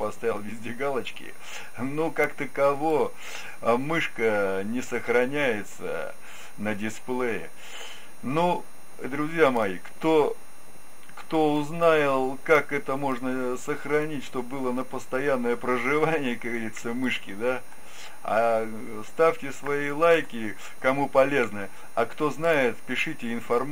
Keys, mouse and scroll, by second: 13.0-14.8 drag, 17.1-18.9 drag, 19.7-21.5 drag.